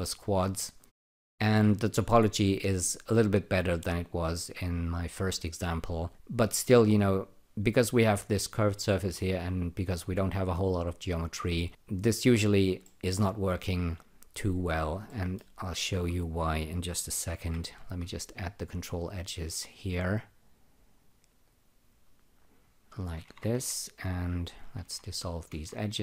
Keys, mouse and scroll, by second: 0.2-0.6 scroll down 6, 0.7 alt+click, 12.8 alt+middle click, 13.4 alt+click, 14.1 alt+right click, 14.6 alt+click, 15.0 alt+middle click, 15.6 alt+right click, 17.2 k, 17.4 k, 18.6 click, 21.4 click, 23.2 Tab, 23.3-25.5 typing, 24.5 click, 25.3 click.